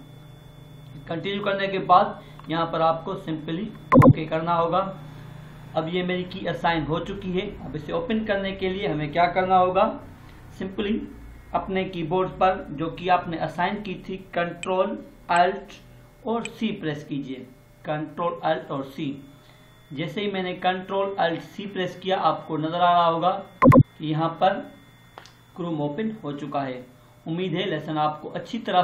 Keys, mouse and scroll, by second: 3.9 click, 16.2 ctrl+alt+c, 23.5 click, 23.5 click.